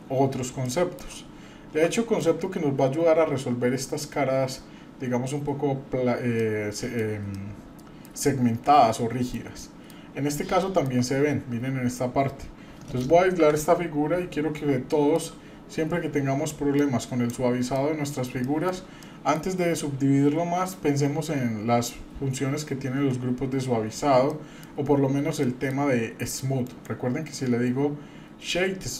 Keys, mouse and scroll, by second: 0.6-1.1 shift+middle drag, 1.3-1.7 scroll down 2, 1.9 middle click, 3.2 scroll up 1, 6.4 middle click, 7.3-8.2 shift+middle drag, 8.2-8.6 shift+scroll down 1, 8.8-9.4 shift+middle drag, 9.5-9.9 middle drag, 10.1-10.6 scroll up 2, 10.6-11.0 shift+middle drag, 11.1 scroll up 1, 13.3 KP_Divide, 14.9 shift+middle drag, 15.7-16.5 scroll down 2, 16.7 click, 17.8 middle click, 18.2 scroll down 1, 18.4-18.8 shift+middle drag, 19.0 middle click, 24.3 middle click, 25.4-25.8 shift+middle drag, 26.6-28.9 right drag.